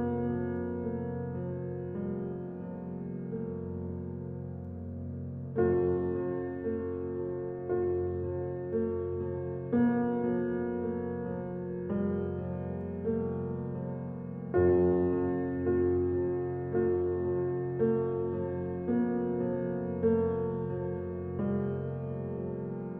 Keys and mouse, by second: 0.4 3, 1.2 shift+click, 2.2 shift+click, 3.0 click, 4.4 e, 9.1 click, 10.4 ctrl+r, 13.9 ctrl+r, 16.9 click, 17.5 3, 18.0 click, 18.6 shift+click, 19.3-19.9 drag, 21.1 shift+click, 22.7-22.9 drag.